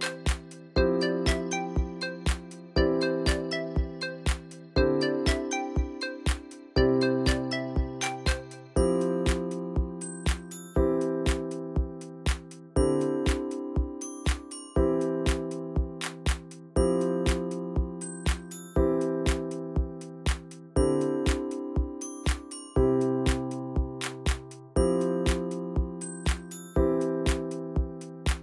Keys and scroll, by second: 2.1 ctrl+v, 2.9 j, 5.2-6.6 alt+Right, 10.2-12.6 typing, 14.0 alt+Right, 14.1 alt+Right.